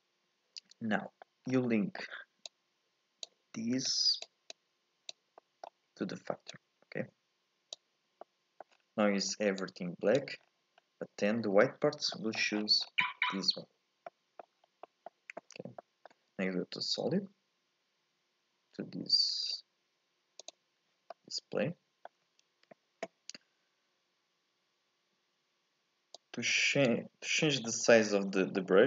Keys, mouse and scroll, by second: 0.0 n, 1.0 scroll up 1, 1.0 middle click, 1.5 scroll up 1, 1.7 middle click, 2.5 click, 3.9 click, 4.5 click, 5.4-6.5 middle drag, 6.5 click, 8.2 middle click, 8.7-9.3 scroll down 7, 9.3 scroll up 1, 9.6 click, 10.4-11.4 scroll up 5, 11.5-12.2 scroll up 2, 12.2 middle click, 12.6 scroll down 2, 14.1 middle click, 14.6 scroll up 1, 14.9-18.8 middle drag, 20.4 click, 21.1-24.1 middle drag, 26.2-27.2 drag, 27.2 scroll down 1, 27.4 middle click, 27.8-28.4 scroll up 2, 28.4 shift+middle click.